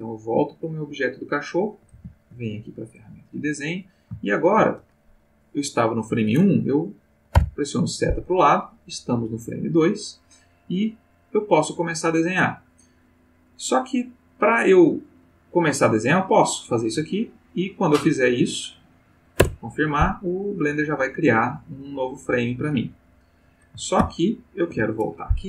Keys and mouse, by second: 0.5 click, 1.9 ctrl+Tab, 2.8 click, 4.3 shift+middle click, 7.4 Right, 16.4 click, 19.4 Return, 24.0 ctrl+z.